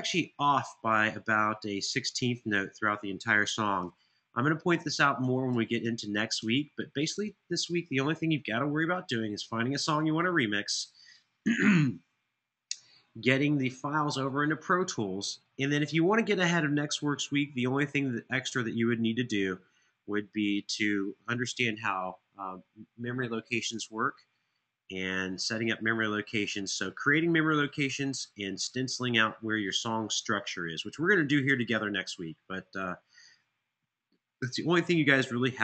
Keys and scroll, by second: 2.0 Return, 3.5 super+[, 4.5 super+[.